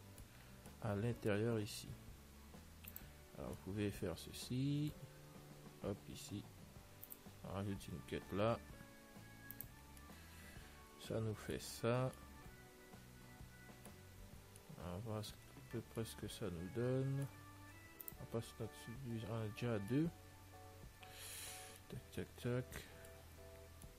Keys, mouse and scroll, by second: 0.1-3.0 middle drag, 3.2 click, 3.8-5.7 middle drag, 5.0 click, 6.4 ctrl+r, 10.5-12.0 middle drag, 12.0 Tab, 12.2 middle click, 14.1-18.0 middle drag, 15.5 Tab, 18.3 click, 20.0-23.9 middle drag, 23.5 Tab.